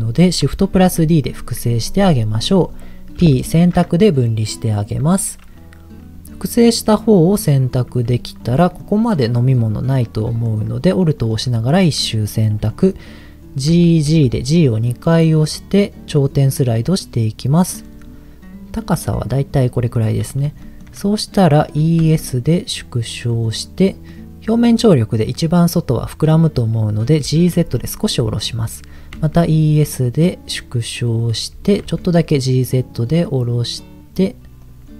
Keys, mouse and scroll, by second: 0.8 shift+d, 2.1-3.2 right drag, 3.2 p, 5.1 Tab, 6.6 middle click, 7.9 Tab, 8.6 middle click, 10.1 middle click, 11.2 alt+click, 12.7 middle click, 13.7 g, 14.1 g, 17.6 click, 17.9-20.0 middle drag, 20.1-20.4 scroll up 2, 20.6 shift+middle click, 20.9-21.7 scroll up 2, 21.8 e, 21.9 s, 23.3 click, 23.9 middle click, 27.4 g, 27.5 z, 28.4 click, 28.9 e, 29.1 s, 31.2 click, 31.5 g, 31.7 g, 31.8 z, 34.6 right click, 34.7 click.